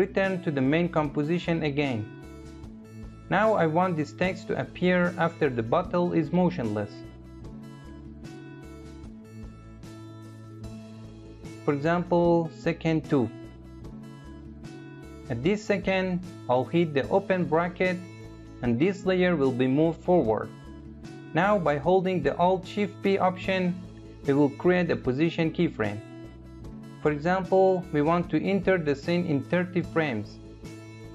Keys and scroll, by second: 16.2 [, 21.8 alt+shift+p.